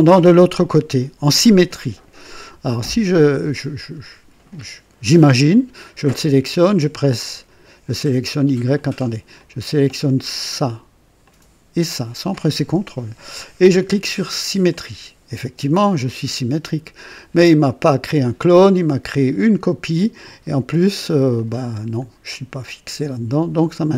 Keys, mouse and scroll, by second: 3.1 click, 7.2 click, 8.7 click, 9.3 click, 11.2 click, 14.6 click, 21.3-22.6 drag.